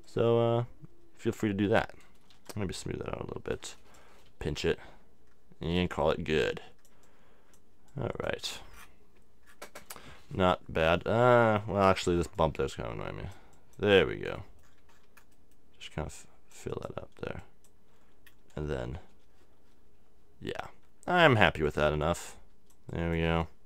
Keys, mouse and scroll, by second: 2.3 s, 2.5-4.3 drag, 4.3 p, 4.5-6.3 drag, 7.0-8.7 drag, 8.8 click, 10.0-11.5 middle drag, 11.9 x, 12.1 x, 12.4-15.4 drag, 15.4 middle click, 15.9-19.2 drag, 21.2 f, 22.0-23.6 drag.